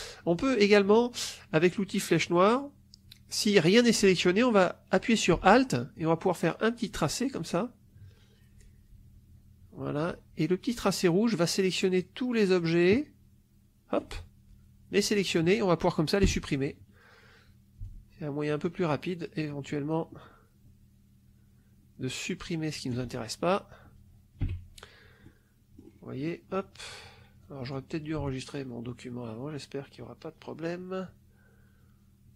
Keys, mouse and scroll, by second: 0.4 click, 2.1 click, 5.9-14.1 alt+drag, 16.1 Delete, 17.8-23.0 alt+drag, 24.3 Delete, 25.2-26.4 drag, 27.3 click, 28.2-32.3 alt+drag.